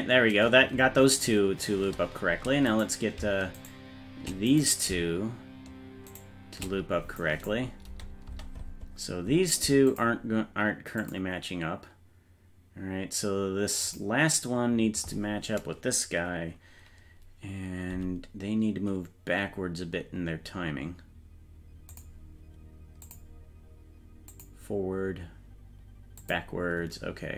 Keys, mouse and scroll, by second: 1.8 space, 2.8 right click, 3.7 shift+right click, 4.6 right click, 6.2 shift+right click, 7.2 click, 7.9 space, 8.3 space, 9.9 click, 11.0 click, 13.8 click, 17.9 g, 23.1 click, 24.3 click, 26.2 click.